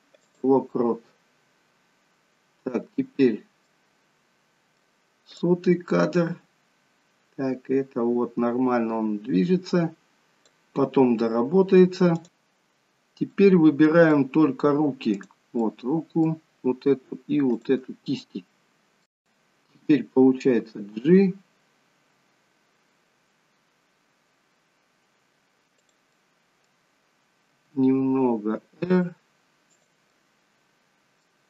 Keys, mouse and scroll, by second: 2.0-3.7 scroll down 2, 3.7 middle click, 5.6 click, 13.5 middle click, 15.3 click, 15.7 middle click, 17.7 shift+click, 18.2 middle click, 20.7 g, 26.1 middle click, 27.6 r, 30.0 middle click.